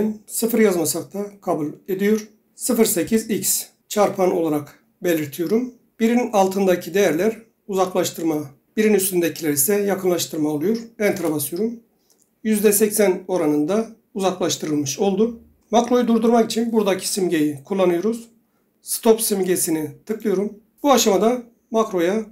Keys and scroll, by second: 0.8 typing, 3.2 x, 11.2 Return.